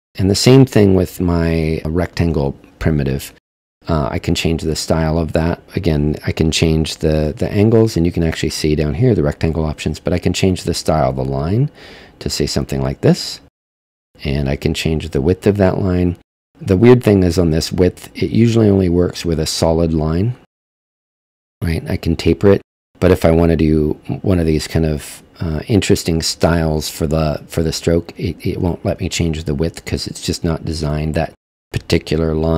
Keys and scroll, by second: 5.6 super+z.